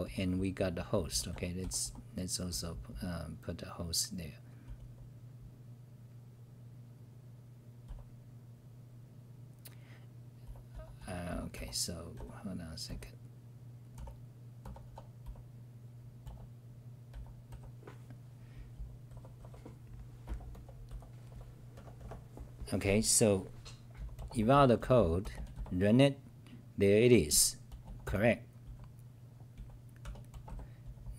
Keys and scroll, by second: 0.0-3.4 typing, 4.6 t, 4.8 t, 7.8 c, 10.2-15.7 typing, 11.1 scroll up 4, 17.3-21.7 typing, 23.9 t, 24.8 t, 25.5 t, 28.7-31.1 typing.